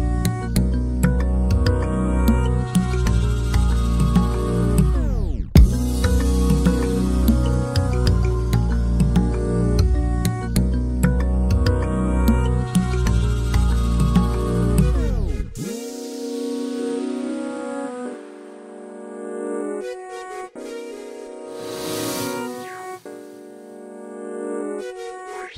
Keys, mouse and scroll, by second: 3.5 click, 4.5-5.3 scroll down 2, 5.3-5.7 scroll down 3, 7.0 click, 7.8-10.0 drag, 10.3 scroll down 3, 10.6-11.5 scroll up 6, 10.7 shift+middle click, 11.0 shift+middle click, 11.5-12.8 drag, 12.8 ctrl+z, 13.5 z, 13.7-14.0 scroll up 2, 14.0 click, 15.2 shift+click, 16.1 ctrl+p, 16.4 alt+a, 16.5 click, 16.6 scroll down 1, 16.7-17.1 shift+middle drag, 17.1 r, 18.0 ctrl+z, 18.1 click, 18.5 shift+click, 19.1 ctrl+p, 19.2 alt+a, 19.5 click, 19.9 r, 20.8 scroll down 2, 20.9 scroll up 1, 22.1-24.0 drag, 25.0 middle click.